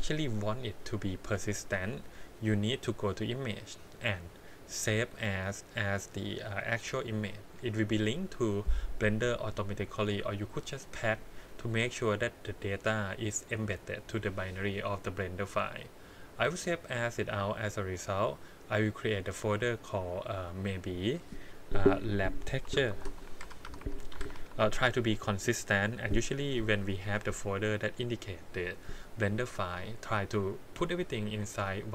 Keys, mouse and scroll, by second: 2.5-16.7 drag.